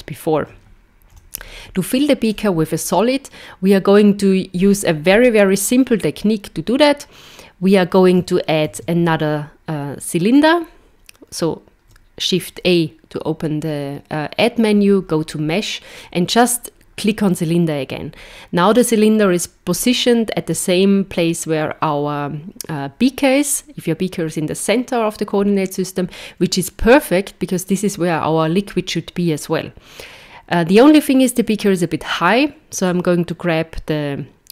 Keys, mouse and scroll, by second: 1.1 z, 8.6 shift+a, 32.9 click.